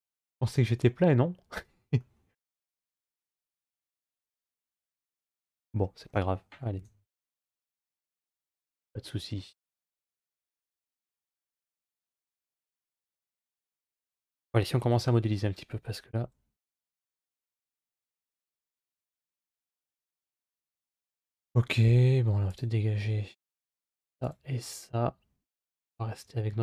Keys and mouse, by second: 6.6 KP_5, 7.5-8.2 middle drag, 10.6-12.6 middle drag, 14.8 KP_3, 17.0 KP_1, 20.0 shift+middle click, 21.1 click, 22.3 click, 24.0 click.